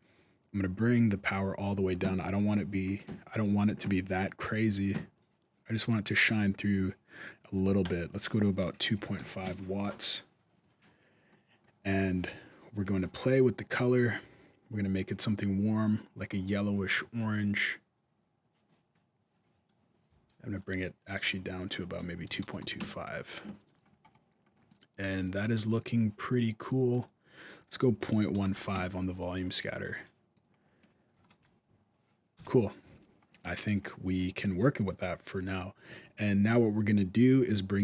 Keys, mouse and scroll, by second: 7.6 click, 10.9-11.3 scroll down 2, 11.3-12.7 scroll up 1, 12.7 click, 12.7-14.0 scroll up 1, 20.4 click, 21.0 click, 22.2 KP_2, 23.5-24.1 scroll down 4, 24.1-24.5 scroll up 2, 24.5 middle click, 24.9 alt+a, 25.0-25.4 scroll up 2, 25.4 middle click, 26.7 click, 29.4-29.7 scroll down 4, 30.0 middle click, 30.1-31.1 scroll down 2, 30.4-31.1 scroll up 2, 31.1-32.0 scroll up 1, 31.1 KP_0, 32.1 KP_0, 32.7 alt+a, 32.9 scroll up 1, 33.2 middle click, 36.7-37.2 scroll up 1, 37.2 middle click.